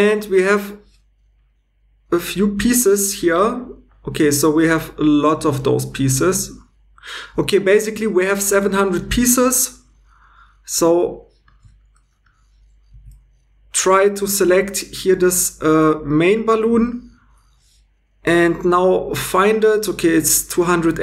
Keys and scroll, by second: 12.9 Tab.